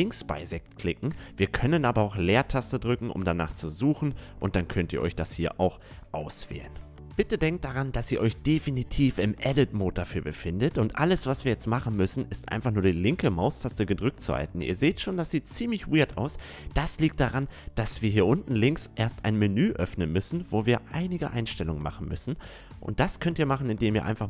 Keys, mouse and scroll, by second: 2.3 space, 14.5 ctrl+z, 16.6-17.7 drag, 23.6-24.2 drag.